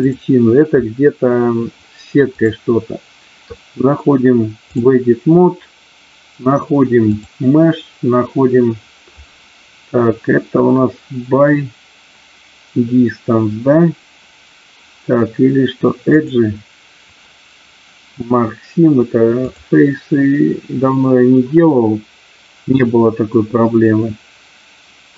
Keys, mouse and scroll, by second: 0.0 click, 2.4-4.9 drag, 7.2-18.6 drag, 19.5-25.1 drag.